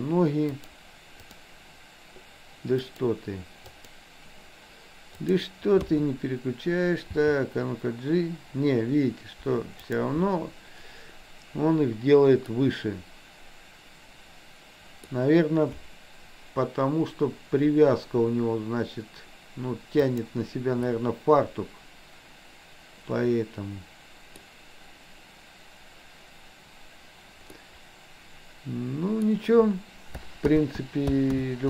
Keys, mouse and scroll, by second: 0.6-1.5 drag, 3.0-4.0 drag, 5.2 click, 5.9 KP_3, 7.0 g, 12.5-15.0 middle drag, 20.1 click, 21.0-24.5 middle drag, 27.6-29.2 middle drag, 30.5 ctrl+z, 31.5 ctrl+z.